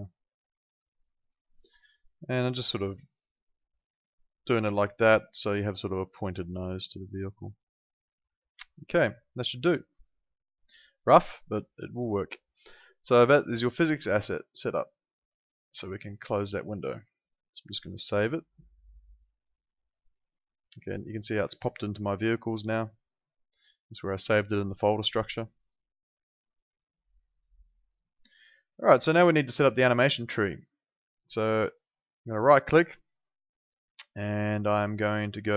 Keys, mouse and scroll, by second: 0.1 click, 6.5 click, 10.9 click, 14.2 click, 18.4 right click, 19.3 click, 32.3 right click.